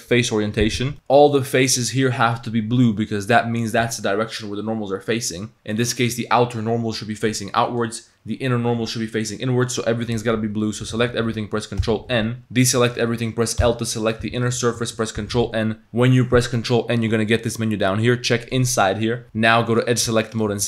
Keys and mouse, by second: 0.9 a, 1.3-2.4 drag, 2.9 click, 5.2 click, 5.8 click, 7.7 click, 10.4 a, 11.8 ctrl+n, 12.4 a, 13.6 l, 14.2 g, 15.2 ctrl+n, 18.5 click, 19.2 a, 19.7 middle click, 19.7 2, 20.3 alt+click.